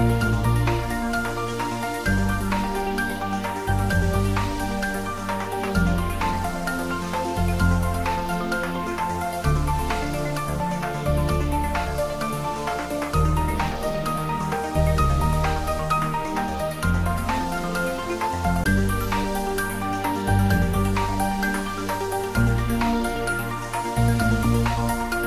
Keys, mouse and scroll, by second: 0.4-4.0 drag, 4.0 click, 5.1 scroll down 1, 6.6-8.5 drag, 10.0 shift+d, 10.6 y, 11.4 x, 22.3 x.